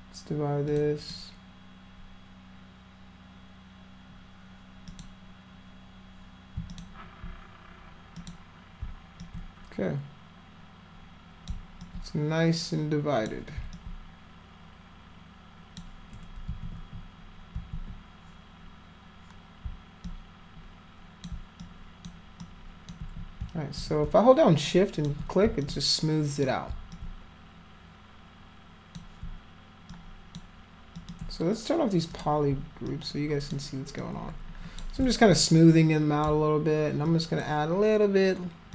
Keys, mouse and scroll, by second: 0.7 click, 1.0 click, 4.9 click, 6.7 alt+click, 8.2 click, 9.2-11.5 alt+drag, 11.8-13.3 alt+drag, 13.8-15.8 alt+drag, 16.5 ctrl+z, 17.6 ctrl+z, 20.1-21.3 drag, 21.6 shift+click, 22.4 shift+click, 23.4 ctrl+z, 24.7 shift+click, 25.6 alt+click, 26.9-29.0 alt+drag, 29.9 shift+click, 31.0 shift+click, 32.1 click, 32.9 shift+click, 34.0 shift+click, 35.3-36.3 alt+drag, 37.1 alt+click.